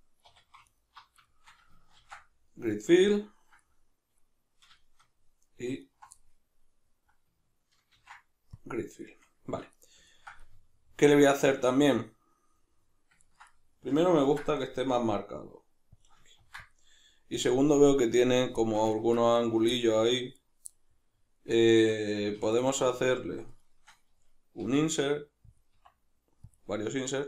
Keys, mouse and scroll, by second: 0.3 2, 0.7 alt+right click, 1.3-5.8 shift+middle drag, 2.0 ctrl+f, 5.8 alt+right click, 6.2-7.9 middle drag, 7.9 ctrl+f, 9.0-16.1 middle drag, 14.2 ctrl+r, 16.1 click, 16.4 ctrl+r, 17.5 click, 18.6-19.3 shift+middle drag, 19.3 right click, 19.7-22.4 middle drag, 22.4 3, 22.5 right click, 22.8 shift+right click, 23.5 shift+right click, 23.7 shift+right click, 24.6 i, 25.6 click, 25.7 i, 26.6 click.